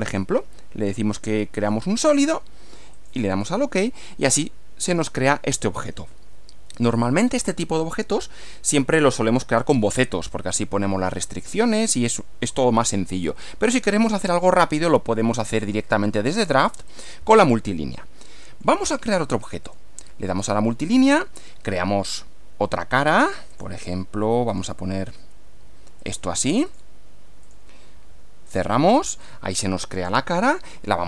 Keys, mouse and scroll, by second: 1.6 click, 3.0 click, 4.4-5.2 middle drag, 13.2-14.5 middle drag, 16.2 click, 17.0 click, 18.0 middle click, 19.7 click, 23.6 click, 24.5 click, 26.0 click, 26.7 click, 27.4 click, 28.5 click, 29.2 click, 29.8 middle click.